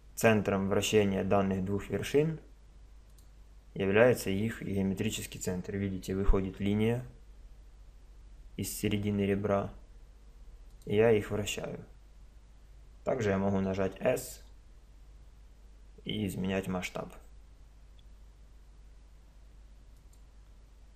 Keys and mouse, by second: 6.2 r, 13.7 s.